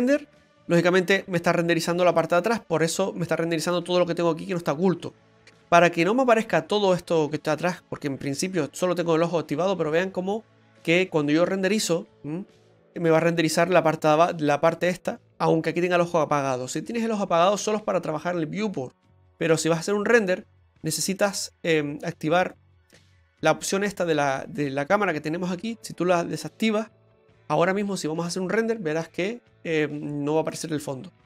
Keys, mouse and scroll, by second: 0.3 click, 8.6 click, 10.4 click, 13.0 click, 16.4 click, 21.2 click, 23.6 click, 25.7 click, 27.8 click, 30.4 click.